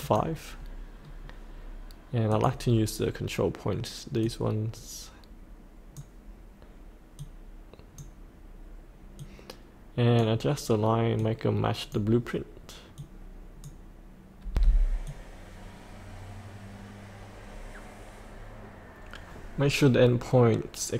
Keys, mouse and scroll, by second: 1.0-2.3 scroll down 1, 2.3-6.0 drag, 7.2-14.0 drag, 14.5 F8, 15.1-20.9 drag.